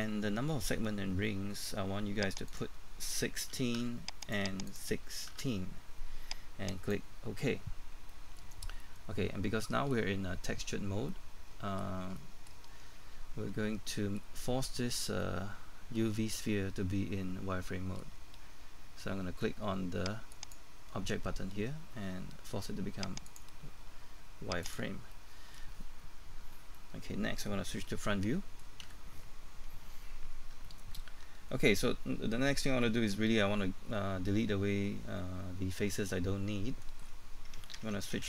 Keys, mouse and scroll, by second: 4.2 KP_6, 5.1 KP_1, 6.7 click, 6.7 KP_6, 8.1 middle click, 20.3 click, 25.1 middle click, 28.8 KP_1, 29.4-30.5 scroll up 1, 30.7 shift+middle click.